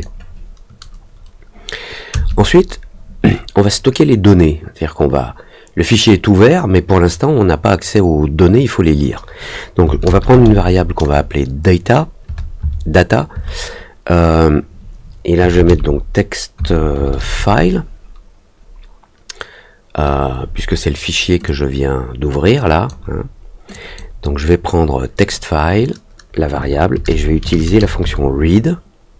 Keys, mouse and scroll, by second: 21.4-22.8 drag, 23.7 click.